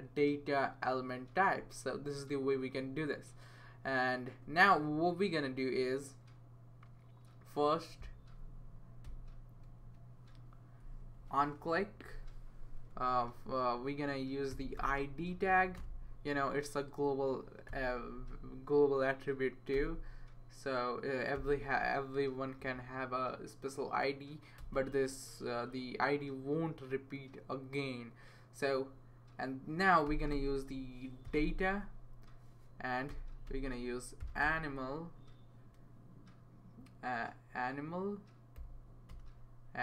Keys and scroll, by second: 9.8 space, 11.0 Left, 12.9 space, 14.3-15.3 typing, 15.8 Return, 17.7 o, 19.7 w, 21.3 i, 22.6 Right, 24.6 space, 29.8-31.7 typing, 32.8-34.7 typing, 38.6 typing, 39.1 Return.